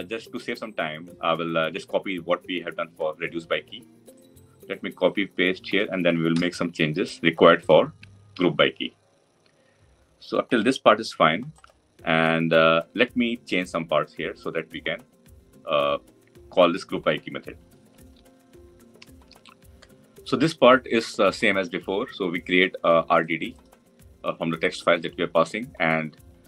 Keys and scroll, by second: 6.1 ctrl+c, 8.2 ctrl+v.